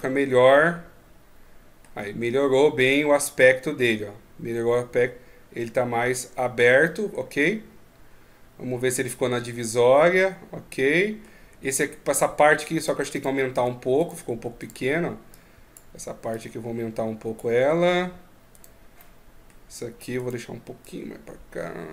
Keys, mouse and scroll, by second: 2.2 scroll down 1, 2.8 scroll down 1, 6.1-6.9 scroll up 2, 6.6 middle click, 12.5 Tab, 12.9 right click, 13.3 Tab, 13.8 right click, 14.4 right click, 15.1 click, 18.3 right click, 18.8 middle click, 19.9 right click, 20.6 click.